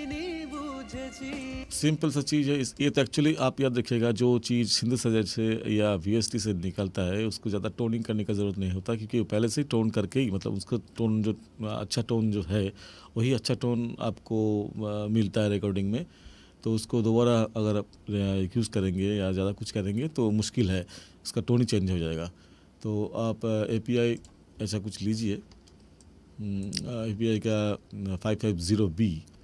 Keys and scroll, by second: 1.5 space.